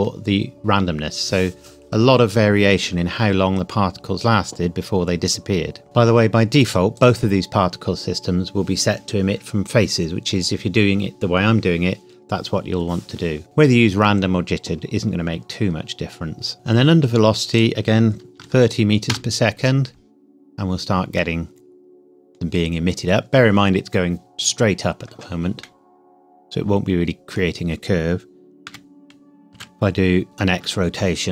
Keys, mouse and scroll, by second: 3.2-3.6 scroll down 1, 6.9 click, 16.5 scroll down 1, 17.5 click, 18.3 KP_0, 19.0 KP_Enter, 20.6 scroll down 1, 21.1 middle click, 21.3 middle click, 25.6 middle click, 28.6 r, 29.7 x, 30.2 KP_5, 30.4 KP_Enter.